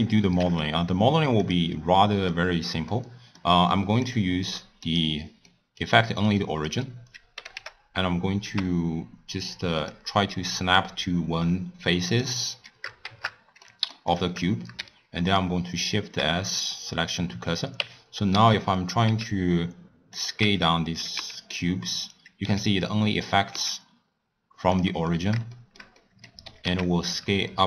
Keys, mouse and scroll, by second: 0.0 scroll down 1, 0.3 shift+a, 1.9-4.0 middle drag, 4.0 click, 4.8 click, 5.4 scroll up 1, 5.5-6.5 middle drag, 6.5 click, 7.3 g, 10.3-12.0 middle drag, 12.0 click, 13.0 shift+Tab, 13.6-14.1 middle drag, 14.1 drag, 14.8 shift+s, 16.9 middle click, 17.8 Tab, 18.3 s, 20.4 Tab, 20.9 s, 22.4 s, 25.1-26.4 middle drag, 26.4 s.